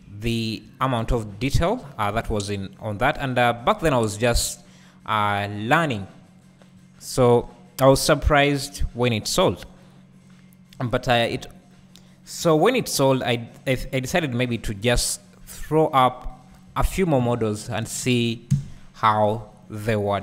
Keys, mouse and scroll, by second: 0.1 `, 1.2 ctrl+z, 2.0-2.6 scroll up 2, 2.6-3.0 scroll down 2, 3.0 `, 4.3-5.2 scroll down 2, 5.2-6.7 scroll up 2, 6.7-7.4 scroll up 1, 7.4-9.8 scroll up 1, 9.8 click, 10.7-11.4 scroll down 1, 11.4 alt+a, 11.9-12.8 scroll down 1, 12.8-14.2 scroll up 1, 14.2 ctrl+r, 15.5 right click, 16.5 KP_7, 17.7 s, 19.6 click.